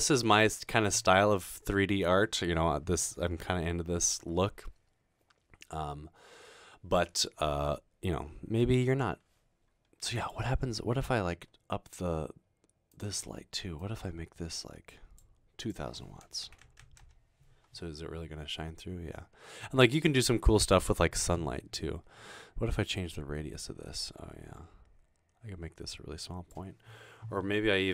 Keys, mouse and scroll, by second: 12.9 click, 13.8-15.0 drag, 15.6 click, 16.3-18.2 typing, 23.1-26.5 drag.